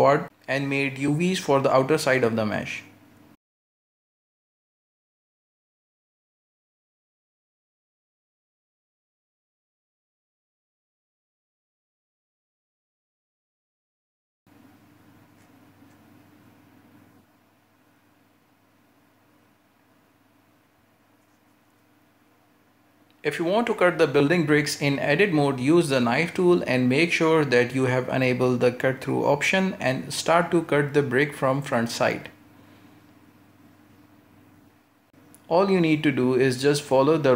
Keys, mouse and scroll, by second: 0.1 alt+shift+right click, 1.4 u, 3.7-4.3 scroll down 8, 4.3-4.8 shift+middle drag, 4.8 a, 5.0 r, 6.1-7.0 scroll down 13, 7.0 r, 8.9 scroll up 2, 9.2 s, 9.7 g, 10.2-10.6 scroll up 5, 10.6 g, 11.3 s, 12.2-12.5 scroll up 1, 12.5 s, 13.0 g, 13.5-14.0 scroll up 1, 14.0 scroll down 1, 14.2-15.0 middle drag, 15.0 Tab, 15.2-15.6 scroll down 2, 15.6 ctrl+space, 16.0-16.5 middle drag, 16.5 scroll down 1, 16.8 a, 17.1-20.1 middle drag, 20.2 scroll down 2, 20.3-21.2 middle drag, 21.2-21.5 scroll up 2, 21.5-22.5 shift+middle drag, 22.5 KP_1, 22.9 KP_3, 23.8 scroll down 3, 24.1-24.5 shift+middle drag, 24.5 scroll up 1, 24.6 Tab, 25.1 shift+middle click, 25.4 scroll up 2, 25.7 a, 25.8 a, 26.2 shift+middle click, 26.6-27.0 scroll up 2, 27.0 k, 27.5-30.6 scroll up 2, 32.9-36.0 scroll up 2.